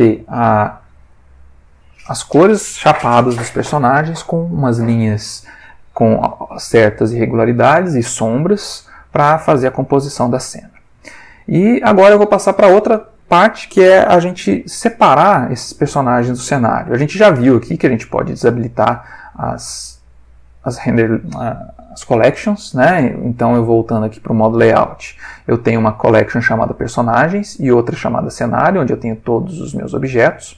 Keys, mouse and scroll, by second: 0.6 v, 23.8 click, 28.3 click, 30.3 click.